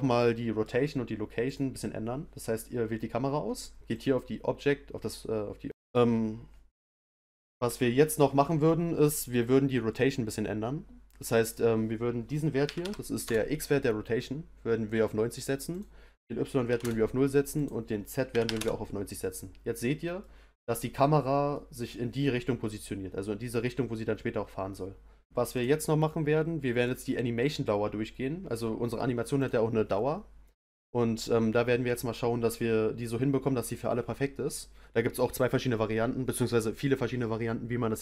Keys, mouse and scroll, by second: 1.4 click, 3.9 click, 5.7-8.3 middle drag, 11.4-14.4 drag, 15.7-19.8 drag, 19.8 scroll up 1, 20.2-24.5 middle drag, 25.5 click, 29.4 click, 29.9-33.0 middle drag.